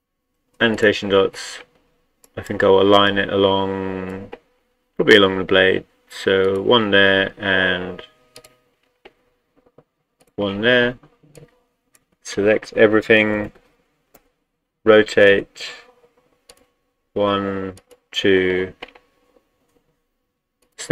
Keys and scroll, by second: 12.9-14.2 typing.